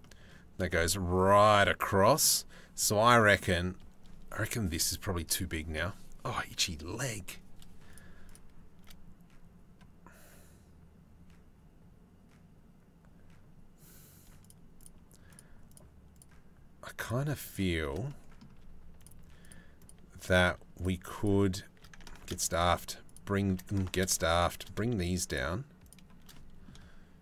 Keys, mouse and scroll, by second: 2.8 middle click, 5.1 middle click, 7.5 shift+middle click, 7.9 shift+middle click, 14.1 shift+click, 14.4 shift+click, 14.9 shift+click, 15.3 shift+click, 15.8 shift+click, 16.6 shift+click, 17.5 middle click, 19.4 shift+click, 20.4 shift+click, 21.8 ctrl+z, 22.1 click, 22.7 click, 23.5 ctrl+z, 23.8 click, 25.5 click, 26.9 shift+click.